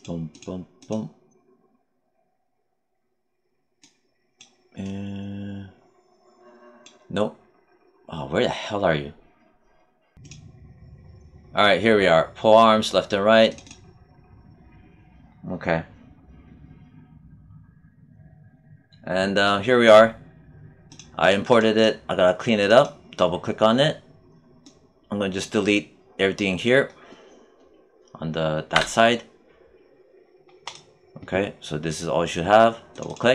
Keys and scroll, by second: 28.7 BackSpace.